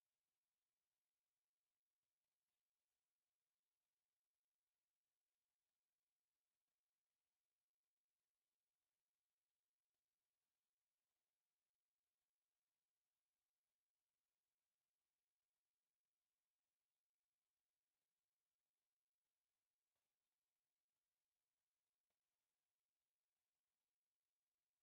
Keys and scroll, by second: 0.2 space, 0.8 F8, 1.2 4, 1.7 Escape, 1.9 t, 2.1 space, 2.4 Escape, 2.7 space, 3.8-5.3 typing, 4.3 Escape, 4.9 Escape, 5.8 Escape, 8.7 Escape, 10.3 f, 10.4 space, 10.7 e, 10.9 Escape, 11.8-16.8 typing, 12.4 Escape, 13.0 Escape, 13.9 Escape, 15.7 Escape, 16.4 Escape, 20.5 Escape, 20.9 e, 21.2 space, 21.5 Escape, 21.6 t, 21.8 space, 22.4 Escape, 22.8-24.7 typing, 23.8 Escape, 24.5 Escape.